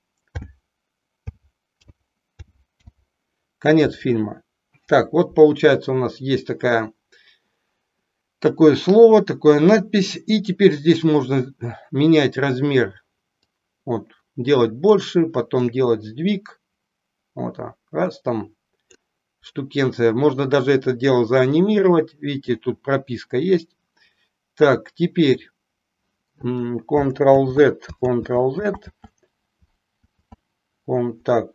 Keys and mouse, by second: 0.3-2.9 typing, 13.5-14.9 drag, 15.8-19.0 drag, 27.3 ctrl+z, 28.0 ctrl+z, 28.7 ctrl+z, 30.1 ctrl+z.